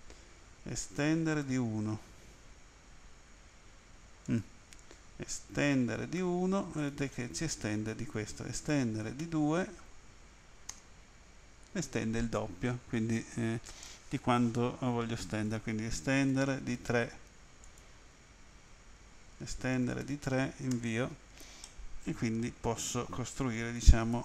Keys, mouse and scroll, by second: 1.0-1.4 typing, 4.3 click, 5.7-6.2 typing, 6.8 click, 8.7-9.2 typing, 10.7 Return, 11.3-11.9 scroll down 1, 12.0-12.5 scroll down 1, 15.3 right click, 16.3 e, 16.9 e, 17.7 click, 19.7 typing, 20.7 Return, 21.7 middle click, 23.8 ctrl+z.